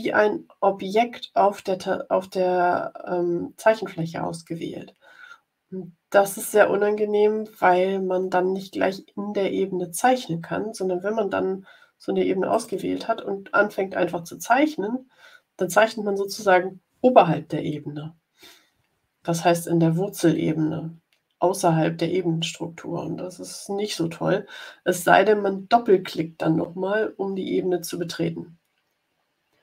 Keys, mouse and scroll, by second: 12.4 click.